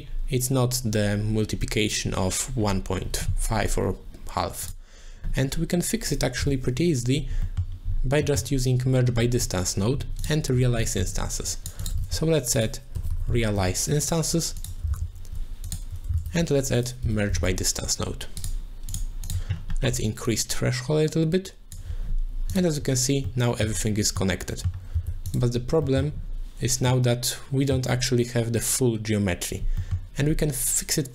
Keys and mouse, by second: 6.4 n, 7.5 middle click, 8.3 middle click, 10.2 click, 11.5 click, 11.8 click, 12.1 shift+a, 14.1 shift+a, 14.9 shift+s, 16.1 shift+a, 18.5 shift+a, 19.2 click, 20.3-21.7 shift+drag, 22.5 click, 23.3 middle click, 24.2 middle click, 25.0 z, 25.3 click, 25.9 middle click, 26.9 middle click, 29.8 middle click.